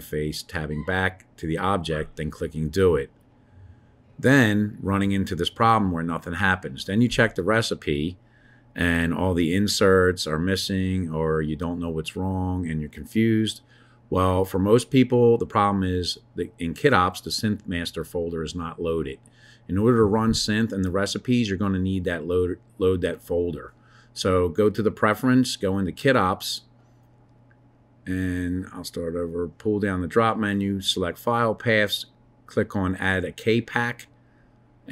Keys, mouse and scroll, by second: 0.0 Tab, 1.7 Tab, 3.9 click, 14.7 click, 17.1-19.5 drag, 22.8-24.1 drag.